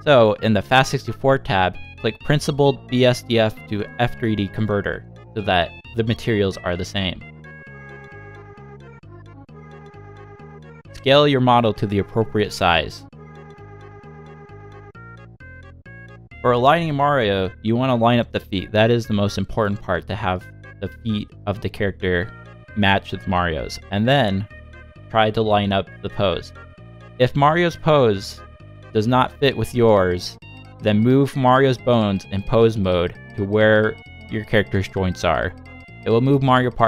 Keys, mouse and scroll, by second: 0.9 click, 1.9 click, 3.2 Tab, 4.3 click, 6.7 r, 11.0 r, 14.8 s, 16.5 r, 20.8 scroll up 1, 20.9 scroll down 1, 21.1 middle click, 21.9 shift+middle click, 22.5-22.9 scroll up 4, 23.0 shift+middle click, 23.5 g, 25.8 s, 28.4-28.8 scroll up 3, 29.0 middle click, 29.8 shift+middle click, 30.3 middle click, 31.5 click, 32.3 g, 35.6 g.